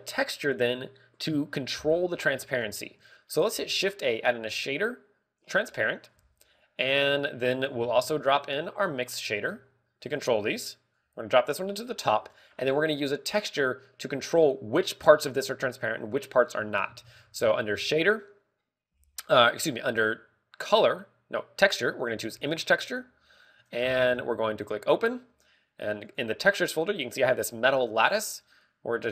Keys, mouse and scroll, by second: 0.0 scroll up 3, 0.5 middle click, 3.0-4.4 scroll down 3, 3.3 middle click, 4.4 shift+a, 7.0 g, 8.5 click, 8.7 shift+a, 11.1 click, 11.1 g, 11.8 click, 12.7-13.5 scroll down 5, 12.9 middle click, 13.6 middle click, 17.9 shift+a, 23.2 g, 24.6 click, 24.7-25.2 scroll up 7, 25.5 click.